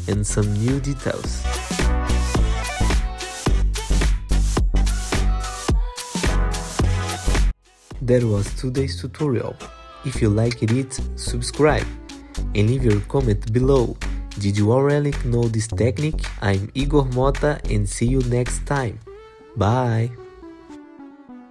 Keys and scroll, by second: 13.8 alt+F4, 14.7 F4, 18.2 w.